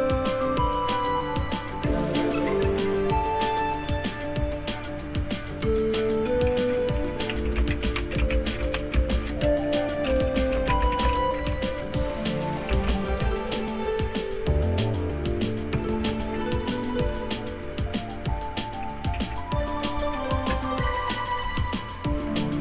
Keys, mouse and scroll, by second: 1.5-3.5 scroll up 2, 3.7 click, 5.6 click, 7.1-13.5 typing, 15.8 Left, 16.0 Left, 16.2 Left, 19.1 y, 20.5 Return.